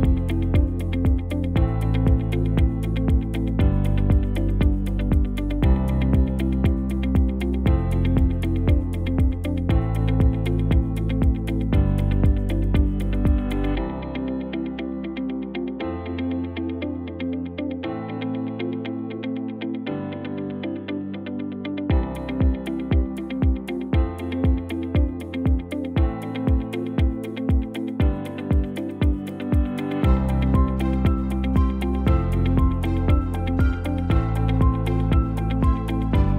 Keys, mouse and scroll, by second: 2.1 middle click, 4.5 shift+click, 9.5 middle click, 11.0 shift+middle click, 11.4-12.0 scroll down 1, 13.1 click, 15.3 Tab, 15.8 click, 17.5 alt+s, 20.1 shift+middle click, 20.4 middle click, 21.2 shift+middle click, 21.5 middle click, 22.0 click, 22.8 alt+s, 24.9 middle click, 25.5 Tab, 25.7 scroll down 1, 26.1 shift+middle click, 26.5 middle click, 27.0 right click, 29.3 click, 29.6 middle click, 30.3 scroll up 1, 30.6 middle click, 32.4 KP_3, 32.9 shift+z, 33.4-33.8 scroll up 1, 34.1 click, 34.6 Tab, 35.1 click, 36.0 g.